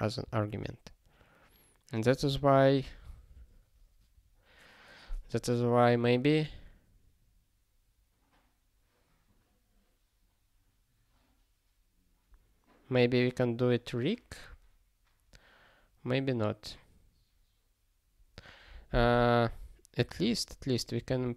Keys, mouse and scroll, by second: 20.1 super+o, 21.0 ctrl+p.